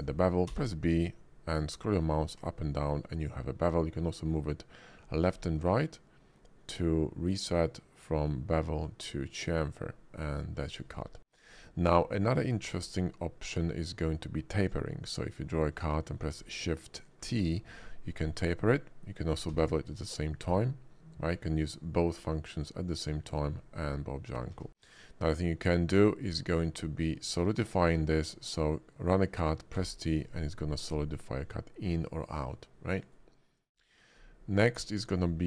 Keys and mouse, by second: 0.4 b, 11.4-14.7 drag, 17.2 shift+t, 19.5 b, 23.3 click, 23.7 click, 24.5 ctrl+z, 26.3-27.7 drag, 29.7 t, 33.0 click, 33.7 click, 35.2-35.4 shift+middle drag.